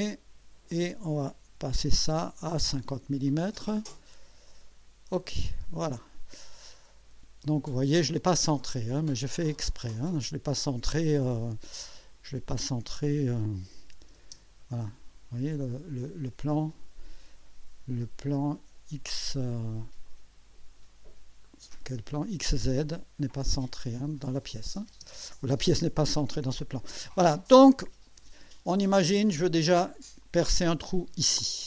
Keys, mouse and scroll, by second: 1.5 5, 2.4 0, 3.5 click, 4.6 click, 5.4-5.9 scroll down 1, 6.7 click, 9.3 click, 12.0 click, 14.2 space, 14.8-16.4 drag, 18.2-21.1 drag, 21.4-22.6 drag, 23.2 click, 24.9 space, 27.6-28.4 drag, 28.9 scroll up 1, 29.4 click.